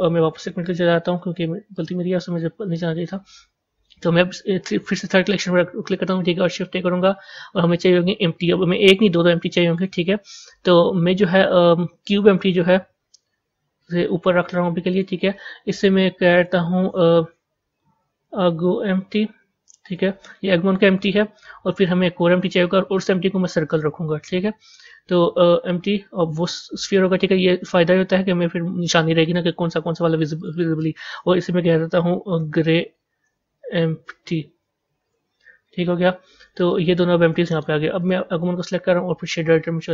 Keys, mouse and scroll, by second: 2.3-12.0 middle drag, 13.2 g, 16.2-19.7 drag, 28.0 g, 30.4-34.9 drag, 36.6-38.0 middle drag, 38.0 click.